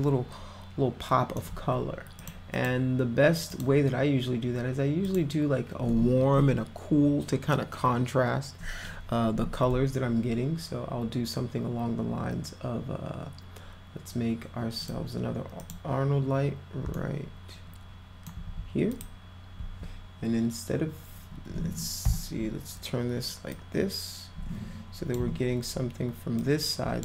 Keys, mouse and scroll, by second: 2.2 click, 2.5 click, 3.5 click, 5.1 click, 14.8 click, 15.6 click, 17.0-18.3 alt+middle drag, 19.0 click, 22.0 e, 23.5-25.1 drag, 26.4 click.